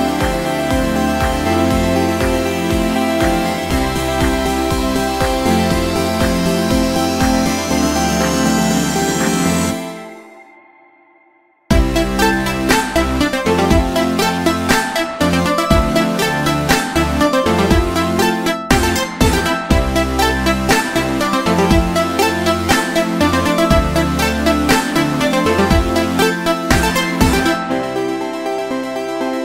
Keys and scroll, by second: 1.3 ctrl+v, 8.9 ctrl+x, 17.7 ctrl+v.